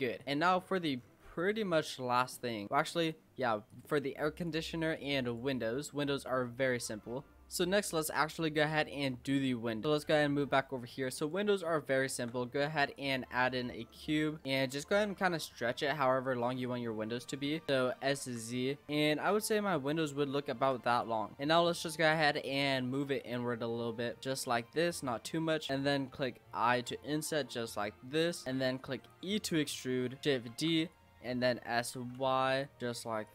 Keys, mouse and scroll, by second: 0.2 drag, 0.2-0.6 scroll down 5, 0.6-0.9 middle drag, 0.9-1.7 scroll down 7, 1.7 scroll down 1, 1.8 shift+middle click, 2.6-3.7 scroll up 13, 3.7 click, 4.4 click, 5.0 click, 5.3 click, 5.6 scroll up 1, 5.6-6.4 middle drag, 6.4 scroll down 4, 6.6-8.7 middle drag, 8.7 click, 9.0-9.3 scroll down 5, 9.3-10.6 shift+middle drag, 10.6-11.2 scroll up 10, 11.2 shift+middle click, 12.1 shift+a, 13.4 scroll down 2, 13.7-14.3 middle drag, 14.3 scroll up 1, 14.4 middle click, 15.0 Tab, 15.5-17.7 middle drag, 17.7-18.0 scroll up 1, 18.0 s, 18.9-20.9 middle drag, 20.9 click, 21.2 middle click, 21.8 click, 24.8 scroll up 3, 24.9-26.1 middle drag, 26.1-26.6 scroll up 1, 26.6 i, 28.4 middle click, 28.7 e, 30.2-30.5 scroll up 1, 30.5 shift+d, 31.3 s.